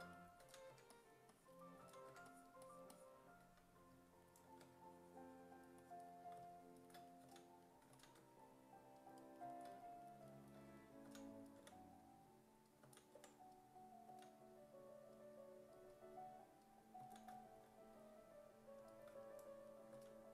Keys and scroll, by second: 0.0-0.7 typing, 1.8 s, 2.1 1, 7.3 s, 7.9 s, 8.2 1, 11.1 s, 11.6 5, 12.9 s, 13.2 5, 14.1 s, 17.0 s, 20.0 s.